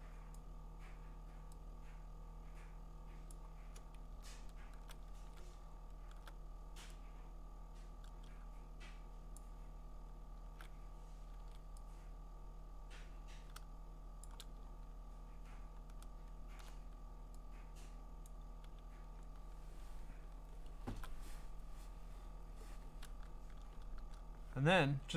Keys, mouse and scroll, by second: 0.3 click, 3.3 click, 4.3-6.3 scroll, 5.1 ctrl+z, 9.4 click, 11.4 ctrl+z, 14.2 shift+click, 14.7-15.5 scroll, 15.5 scroll, 15.8 scroll down 2, 15.9 scroll down 2, 16.3 scroll up 6, 18.3 click, 18.8-20.5 scroll down 13, 20.5-21.7 scroll up 3, 23.5 scroll.